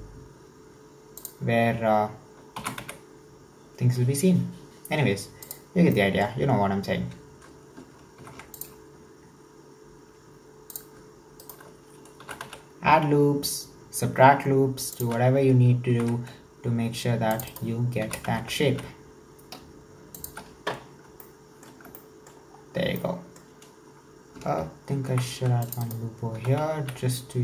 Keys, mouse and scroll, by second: 2.6 s, 5.9-8.2 shift+middle drag, 8.2 ctrl+r, 11.4 alt+right drag, 12.2 s, 16.0 ctrl+r, 18.0 s, 20.9-21.3 scroll down 5, 21.3-22.5 shift+middle drag, 22.5-23.0 scroll up 4, 23.0-25.1 shift+middle drag, 25.1 ctrl+r, 26.4 s.